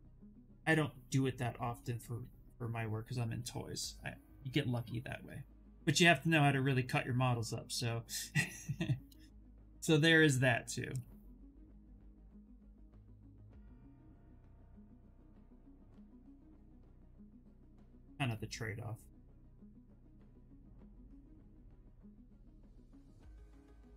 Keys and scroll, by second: 6.6 s, 9.5 d, 11.9 s.